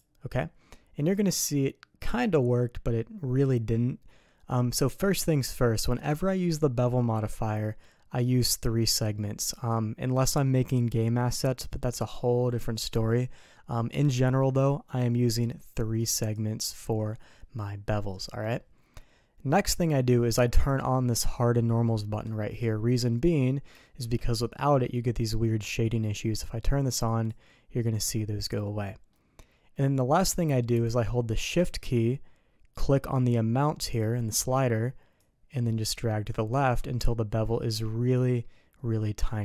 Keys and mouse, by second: 0.7-4.5 middle drag, 16.2 click, 20.5 click, 23.1 middle click, 23.8 shift+middle click, 24.5 middle click, 27.0 click, 29.1-30.3 middle drag, 35.1-39.4 shift+drag.